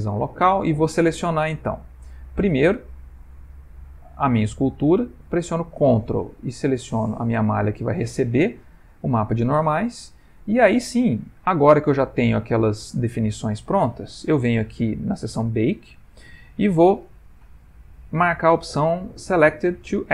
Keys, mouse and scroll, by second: 0.5 ctrl+middle click, 1.7 click, 2.5 click, 7.2 ctrl+click, 8.7 middle click, 11.2 click, 14.2 middle click.